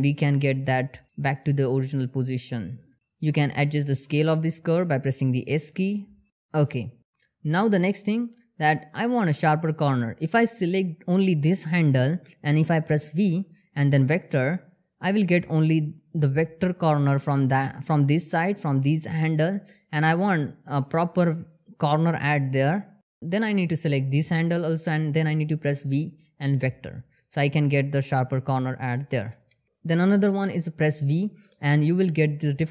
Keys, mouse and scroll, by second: 0.1 r, 2.9 s, 5.9 click, 7.1 scroll up 1, 7.6 click, 12.6 v, 13.6 click, 24.5 v, 25.3-26.2 drag, 29.0 ctrl+Num_Lock, 29.3 ctrl+z, 29.8 v.